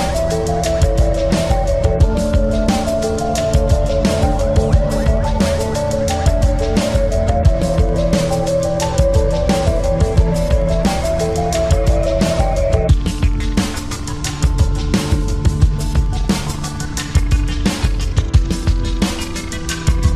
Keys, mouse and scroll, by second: 1.0-3.9 right drag, 3.9 e, 6.4-8.1 drag, 6.7 s, 8.8-10.3 drag, 9.6 KP_1, 12.3 e, 13.4-15.2 drag, 13.7 s, 17.8 ctrl+z, 18.6 e.